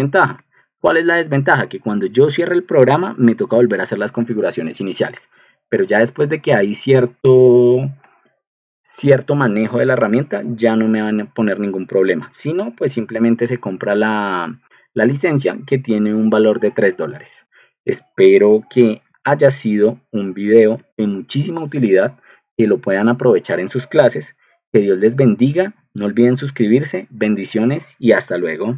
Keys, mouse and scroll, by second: 20.7 ctrl+alt+1.